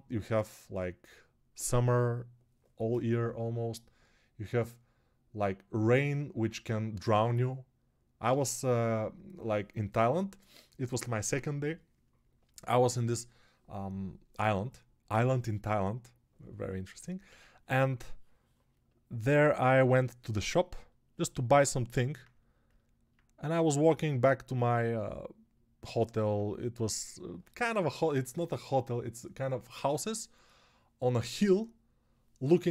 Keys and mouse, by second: 19.6 g.